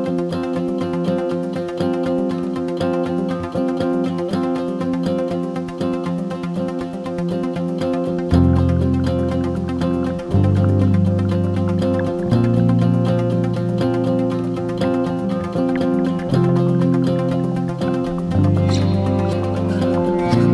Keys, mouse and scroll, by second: 1.5 ctrl+r, 3.1 g, 4.3-4.6 scroll up 3, 6.0 alt+shift+click, 6.5 alt+shift+click, 7.6 alt+click, 8.9 alt+shift+click, 10.6 alt+e, 12.8-13.5 scroll down 2, 13.5 3, 13.6 click, 14.3 i, 17.6 g.